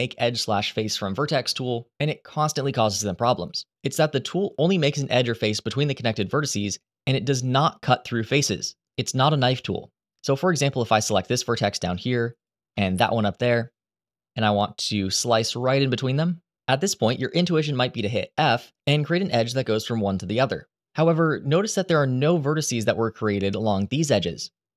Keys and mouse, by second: 10.8 click, 11.2 shift+middle click, 11.9 ctrl+z, 18.8 f.